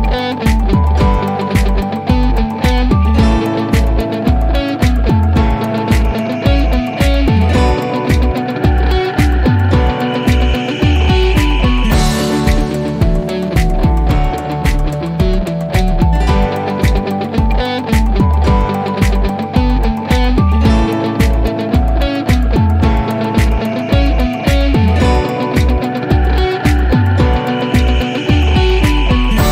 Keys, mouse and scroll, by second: 1.0-1.6 drag, 2.4 typing, 3.4 Return, 4.9 click, 7.1-7.6 click, 8.2 5, 8.6 Return, 12.3 click.